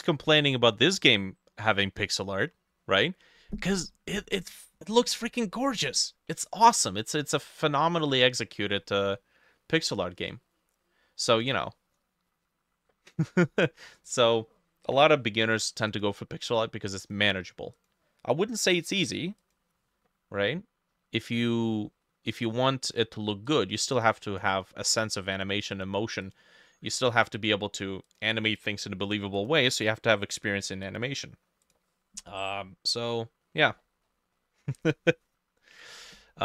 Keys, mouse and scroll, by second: 24.0-27.8 drag, 28.5-32.2 drag, 33.5-36.0 scroll down 20.